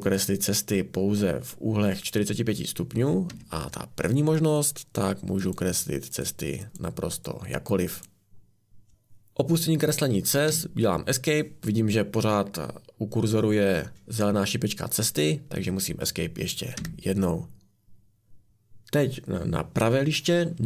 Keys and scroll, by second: 3.3 Escape, 16.8 Escape.